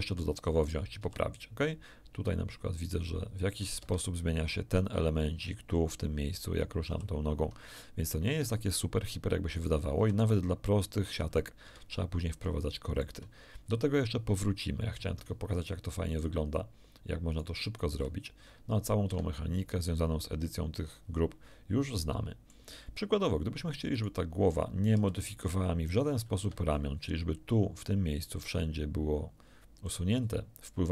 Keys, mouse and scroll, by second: 0.6 right click, 1.0 r, 3.8 Escape, 6.8 r, 8.3 Escape, 9.5 right click, 9.9 r, 11.6 Escape, 12.1 shift+middle click, 12.1-12.5 scroll down 1, 12.6 shift+click, 16.0 right click, 17.2 right click, 17.8 r, 19.0 Escape, 21.9 shift+middle click, 23.9 right click, 24.9 r, 26.4 Escape, 26.6 scroll up 1.